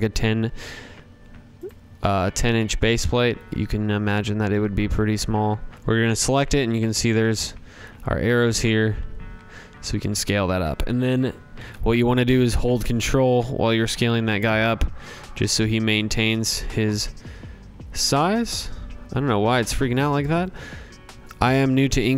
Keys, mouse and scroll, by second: 0.6 click, 1.1 click, 2.1-3.5 typing, 3.5 click, 4.1 click, 10.5-14.9 drag, 15.3-17.9 drag, 20.4 click.